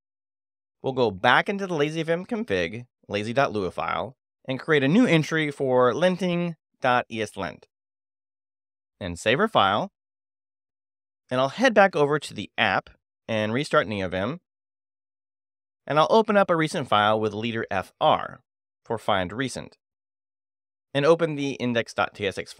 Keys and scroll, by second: 0.0-7.7 typing, 5.1 Escape, 8.1 Escape, 8.6 Escape, 8.8 shift+w, 8.9 Return, 10.8 l, 11.7 Escape, 11.9-13.4 typing, 12.5 Return, 13.6 Return, 16.0 space, 16.2 f, 16.4 r, 20.0 Return.